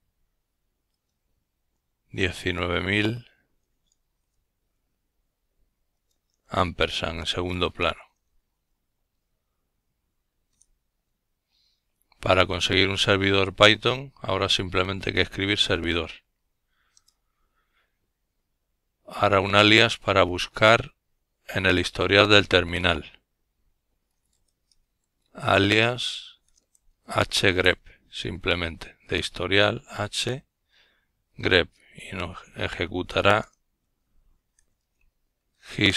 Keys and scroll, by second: 0.6 typing, 9.9 Return, 16.9-21.1 typing, 24.2 typing, 27.5-29.4 typing, 31.9-34.6 typing.